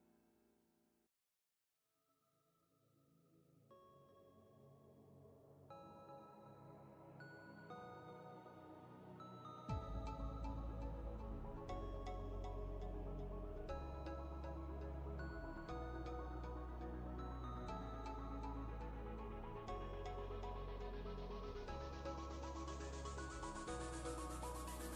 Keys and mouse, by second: 1.9-6.7 drag, 20.4-21.0 ctrl+drag, 23.1 ctrl+click.